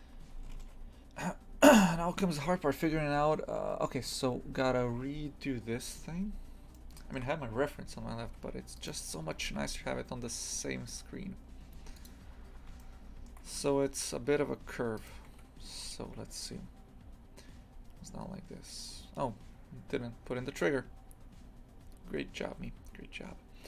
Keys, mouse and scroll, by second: 0.2 Tab, 6.3-6.7 scroll up 1, 6.7-8.2 shift+middle drag, 8.2 Tab, 8.7 right click, 9.4 g, 12.2 scroll up 3, 12.8 shift+middle click, 13.5-14.4 scroll down 1, 14.4-14.9 scroll down 1, 14.9 right click, 15.2 Tab, 16.3-17.0 scroll up 1, 17.0-19.8 scroll down 1, 21.3-21.6 scroll up 1, 21.6-22.4 scroll down 1, 22.4 1, 22.7-23.6 scroll up 1.